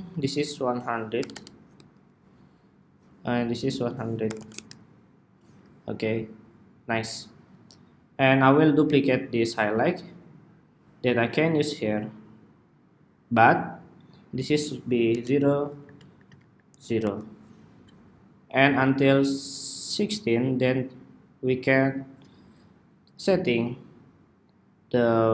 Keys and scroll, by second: 9.4 super+d.